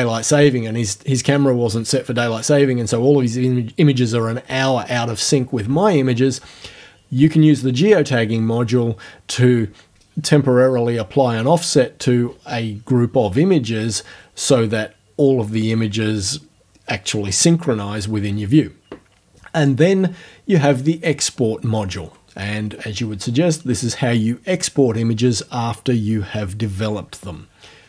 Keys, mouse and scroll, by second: 19.6 click.